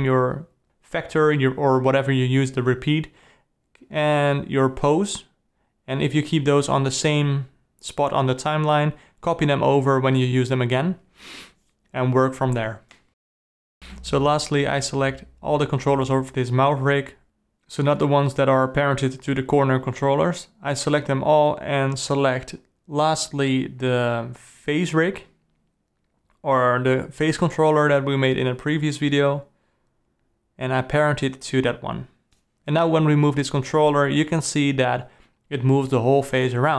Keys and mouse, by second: 3.3-3.8 ctrl+middle drag, 3.9-4.4 alt+middle drag, 4.3 alt+KP_Divide, 4.4 alt+click, 4.6 alt+middle click, 4.6 alt+click, 4.7 alt+middle click, 4.8 alt+drag, 5.0 alt+middle click, 5.0 alt+click, 5.2 alt+middle click, 5.2 alt+click, 5.3 alt+middle click, 5.4 alt+click, 6.2 alt+middle click, 6.3 alt+click, 6.4 alt+middle click, 6.5 alt+click, 6.6-6.9 alt+middle drag, 6.9 alt+click, 6.9 alt+middle click, 7.1 alt+click, 7.5 alt+middle click, 11.7-12.8 alt+middle drag, 12.8 alt+click, 12.9 alt+middle click, 13.0 alt+click, 13.1-13.5 alt+middle drag, 13.5 alt+click, 15.5 g, 17.6 shift+drag, 18.7 shift+click, 21.4 alt+click, 21.5 alt+middle click, 22.9 g, 24.5-25.2 ctrl+middle drag, 25.3 alt+middle click, 25.6 click, 25.6 alt+middle click, 31.0 ctrl+p, 34.0 alt+a, 34.2 click, 34.8 r, 36.1 r.